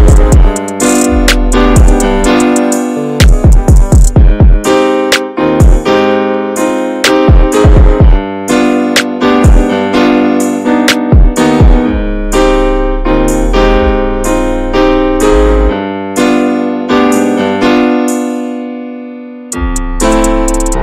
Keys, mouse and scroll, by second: 1.6-1.9 scroll down 9, 1.9 Tab, 2.1 drag, 2.4-2.9 shift+middle drag, 2.9 scroll up 1, 3.1-3.7 shift+middle drag, 3.7 ctrl+s, 4.3-4.7 alt+middle drag, 4.7 Tab, 5.0 alt+z, 5.3-6.1 shift+scroll up 6, 5.4 shift+middle click, 6.1 click, 6.5 shift+middle click, 6.6-7.2 shift+scroll up 1, 7.2 ctrl+z, 7.5 click, 8.1 shift+middle click, 8.3-9.0 scroll up 1, 9.0 middle click, 9.9 ctrl+click, 10.8 alt+middle click, 11.5 s, 12.7-13.2 scroll down 10, 13.2 shift+middle click, 13.5-14.1 scroll up 3, 14.1-14.6 scroll down 2, 14.6 s, 16.3 Tab, 16.5 middle drag, 16.7 scroll up 1, 16.8 alt+z, 17.2 middle click, 17.3-18.0 scroll up 2, 17.6 shift+middle click, 18.0 ctrl+s, 18.2 middle click, 18.4 scroll up 1, 18.6 Tab, 19.3 Tab, 19.5 click, 19.7 scroll down 2, 19.9 shift+middle drag, 20.1 scroll up 1, 20.2 scroll down 1, 20.4-20.8 shift+middle drag.